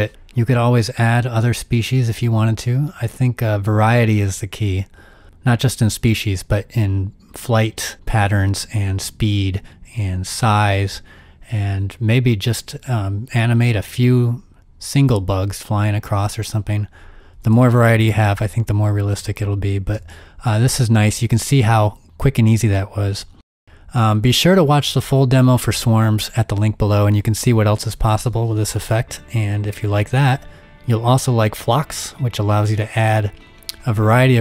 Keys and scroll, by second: 17.9 z, 19.8 space.